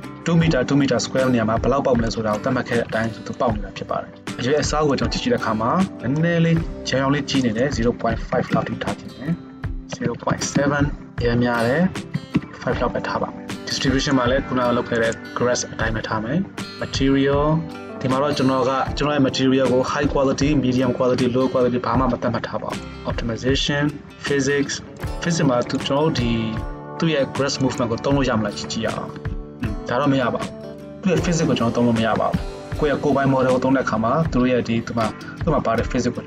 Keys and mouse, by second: 0.0-25.1 shift+drag, 5.1 KP_0, 13.2-14.4 middle drag, 25.1-25.8 middle drag, 25.8-36.2 drag, 29.3 shift+space, 32.2 shift+space.